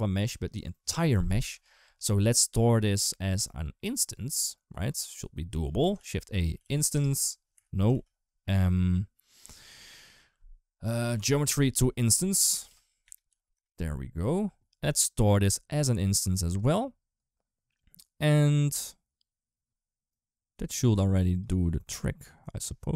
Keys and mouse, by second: 3.9 click, 4.8 click, 5.9 shift+a, 7.8 shift+a, 15.1-16.4 drag, 20.6 click.